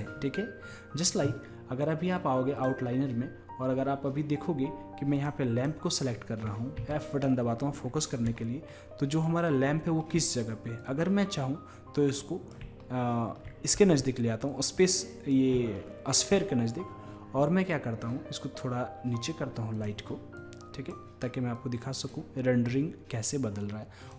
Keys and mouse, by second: 0.0-4.1 drag, 5.2-6.9 drag, 7.0-7.4 drag, 10.8-12.5 middle drag, 12.5 drag, 14.6-16.2 drag, 16.2 middle drag, 18.2-23.5 drag, 24.1 click.